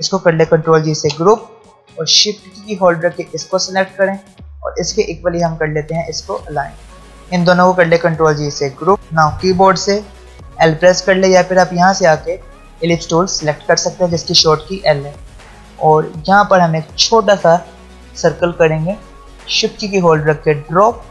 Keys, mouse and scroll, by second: 0.9 ctrl+g, 2.5 shift+click, 6.8 alt+scroll down 1, 7.2 shift+click, 8.0 ctrl+g, 9.0 ctrl+alt+scroll down 1, 10.2 l, 11.1 ctrl+alt+scroll up 2, 13.9-15.0 ctrl+alt+scroll down 2, 15.0-15.4 ctrl+alt+scroll down 1, 15.6 alt+scroll up 1, 18.2-21.1 drag.